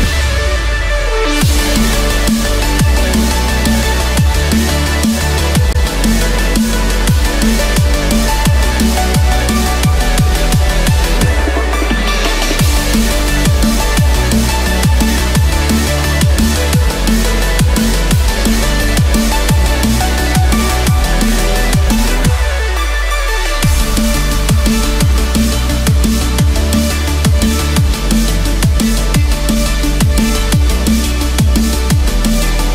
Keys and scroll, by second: 15.6 ctrl+=, 16.1 ctrl+=, 19.4 ctrl+=.